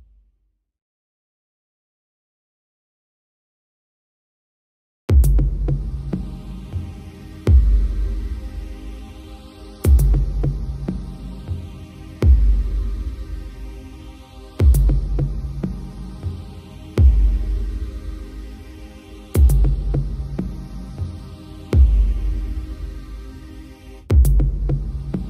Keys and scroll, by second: 11.3 ctrl+t.